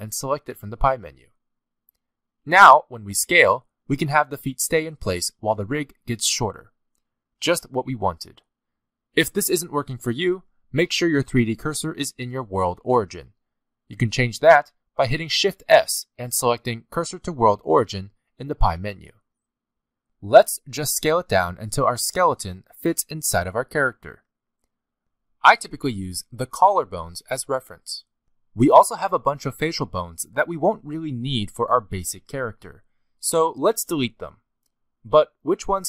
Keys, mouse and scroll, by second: 2.4 middle click, 3.4 s, 6.8 shift+middle click, 7.2-7.8 scroll up 3, 7.7 shift+middle click, 8.0 scroll down 1, 8.2 middle click, 14.5 shift+s, 20.4 middle click, 21.9 s, 24.0 shift+middle click, 24.4-24.8 scroll up 4, 26.7 scroll down 3, 27.0 middle click, 27.4 shift+middle click, 28.6 s, 30.2 middle click, 30.8 shift+middle click, 31.7 click, 32.3 middle click, 32.9 shift+middle click, 33.4-33.9 scroll up 6, 34.1 middle click.